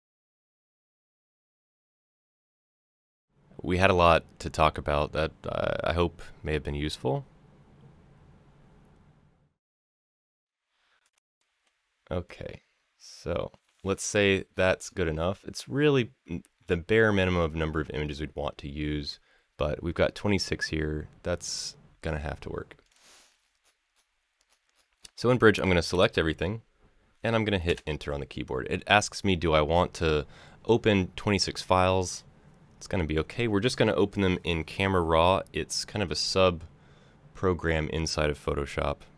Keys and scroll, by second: 3.7 Delete, 5.4 Delete, 11.3 Delete, 25.6 ctrl+a, 27.4 Return.